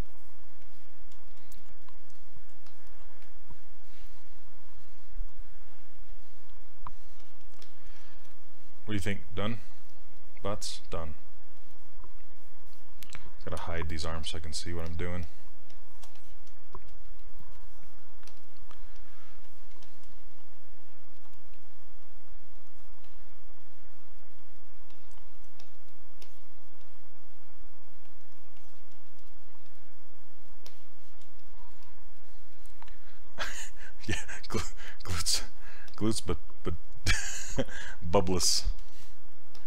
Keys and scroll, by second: 13.6 q, 20.2 s.